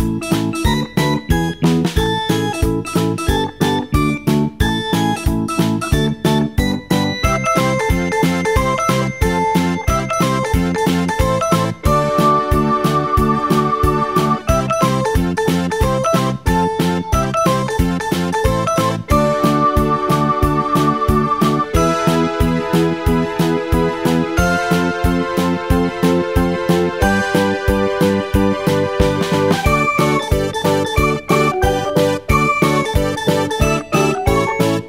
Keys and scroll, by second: 12.6 ctrl+z, 13.3 ctrl+z, 18.7 t, 19.9-22.1 typing, 23.3 Return, 24.1 Return, 28.7 Delete.